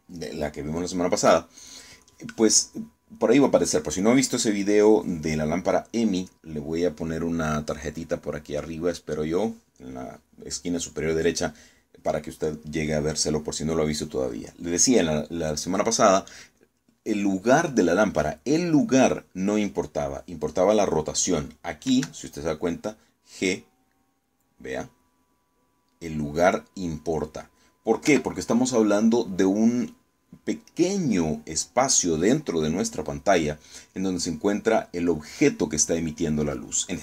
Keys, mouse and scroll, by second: 22.5 g, 28.7 Escape.